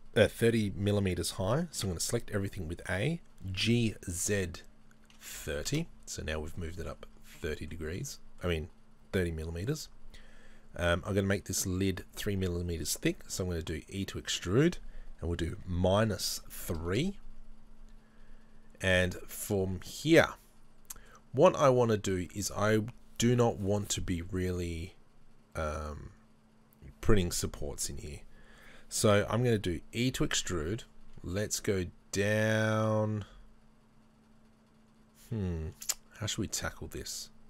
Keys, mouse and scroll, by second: 1.8 a, 5.7 g, 5.8 KP_Enter, 7.1-7.5 scroll up 2, 9.5 scroll down 1, 11.0 e, 17.2 KP_Enter, 20.0 middle click, 30.1 e, 32.7 e.